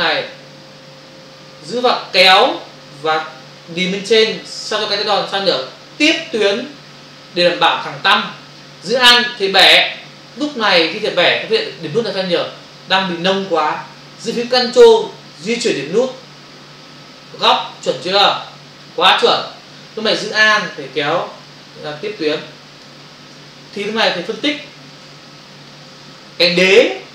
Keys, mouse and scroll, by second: 1.8 click, 15.3 ctrl+click, 21.5 alt+click, 23.4 space.